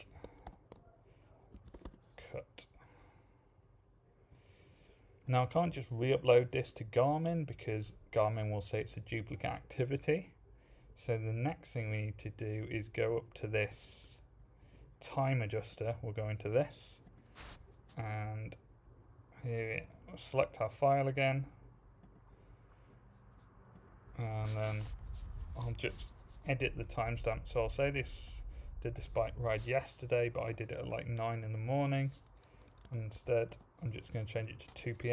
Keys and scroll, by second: 0.0-2.3 typing, 32.6-33.5 typing, 33.1 Tab.